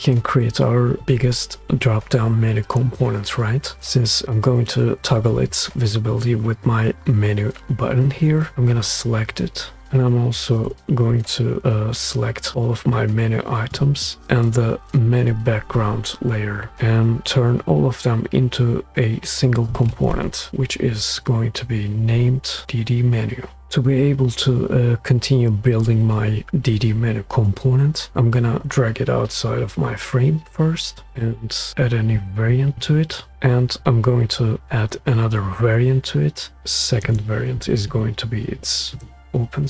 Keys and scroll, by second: 20.2 alt+super+k, 37.0 shift+o, 38.1-39.6 typing.